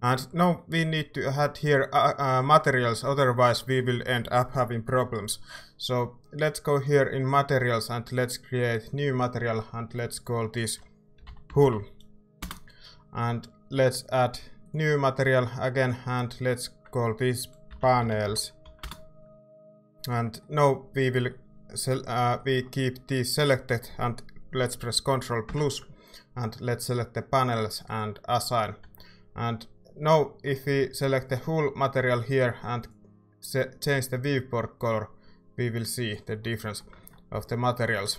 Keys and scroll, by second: 10.9-12.1 typing, 12.4 Return, 17.5-19.1 typing, 20.1 Tab, 22.5 typing, 28.8 ctrl+Tab, 37.3 a.